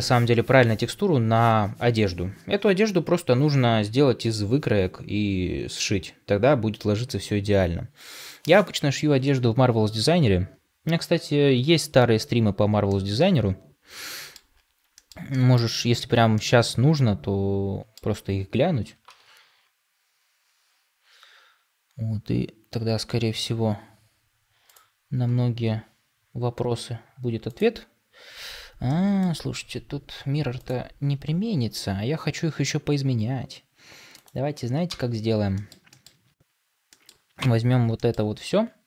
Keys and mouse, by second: 12.8-14.2 middle drag, 14.9 shift+middle click, 15.2 middle click, 16.2-18.8 middle drag, 28.8 middle click, 34.1 click, 34.8 ctrl+space, 35.4 shift+middle drag, 35.8 middle click, 36.8 middle drag, 37.3 Tab, 37.9 shift+middle click, 38.3 a.